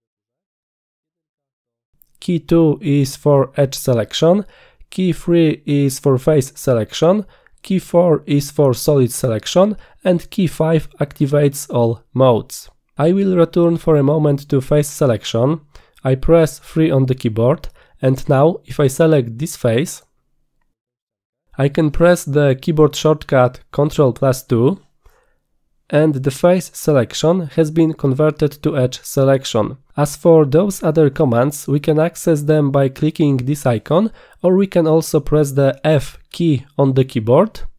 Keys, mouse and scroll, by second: 1.1 1, 3.4 2, 5.4 3, 8.3 4, 16.8 3, 19.8 click, 25.0 ctrl+2, 33.1 click, 34.6 click, 36.2 f.